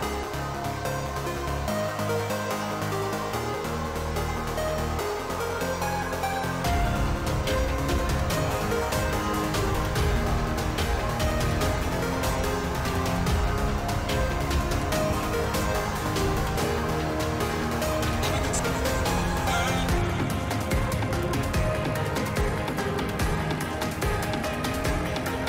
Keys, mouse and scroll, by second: 0.0-0.2 typing, 0.8 middle click, 1.4 click, 1.8 middle click, 3.7-4.9 middle drag, 6.9 middle click, 9.4 g, 10.8 s, 13.5 g, 14.4 s, 17.6 shift+middle click, 20.1 click, 20.6 middle click, 22.4-25.1 middle drag.